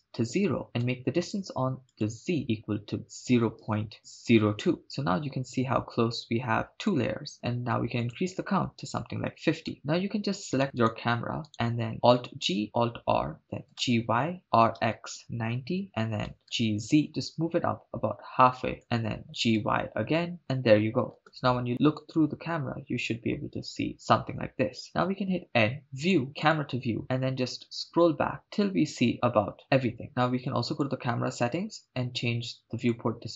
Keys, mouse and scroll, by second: 1.9-4.8 drag, 4.8-7.0 middle drag, 8.0-9.7 drag, 9.7 middle click, 9.7-10.6 scroll down 3, 10.6 right click, 10.8 right click, 11.9 right click, 11.9 click, 11.9 g, 11.9 y, 12.8 alt+r, 13.7-16.8 typing, 14.4 click, 15.8 Return, 18.8 ctrl+click, 19.3 g, 20.4 y, 20.4 click, 21.2 KP_0, 25.2 n, 26.0 click, 26.4 click, 27.0 n, 27.1-27.7 scroll down 4, 28.5 scroll down 3, 29.1 scroll up 1, 30.7 click, 32.8 click, 33.2-33.3 scroll down 2.